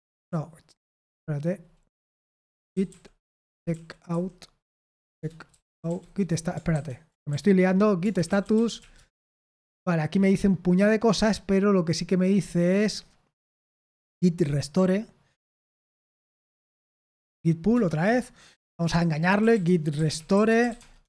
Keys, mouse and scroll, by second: 0.0-0.2 typing, 1.9 ctrl+w, 2.3 ctrl+w, 2.4-9.2 typing, 6.7 ctrl+w, 10.3-11.7 scroll up 1, 11.7-13.1 scroll down 1, 13.1-14.4 scroll down 1, 15.6 ctrl+p, 15.9 ctrl+p, 16.2 ctrl+p, 17.2 ctrl+n, 17.7 ctrl+Return, 18.6 Return, 19.0-21.0 typing.